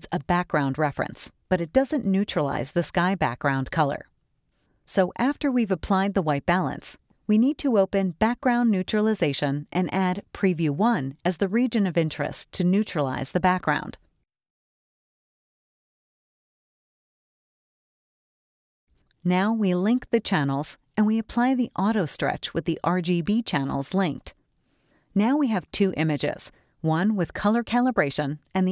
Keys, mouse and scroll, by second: 8.6 middle click, 8.7 click, 10.0 click, 12.3-15.2 ctrl+drag, 16.5 click, 20.1 click.